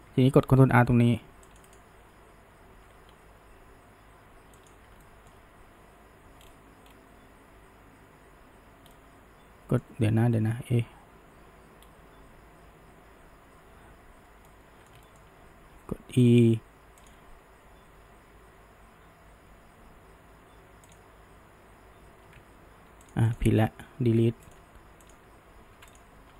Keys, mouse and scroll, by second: 1.7-3.0 right drag, 3.0 g, 5.0-6.4 shift+middle drag, 6.4-6.9 scroll, 8.9-11.8 middle drag, 11.8-14.0 scroll, 14.5-15.7 middle drag, 15.7 e, 20.9 shift+drag, 23.1 click, 23.3 shift+click, 23.7 middle click, 24.1 Delete, 25.1 click, 25.7 Delete.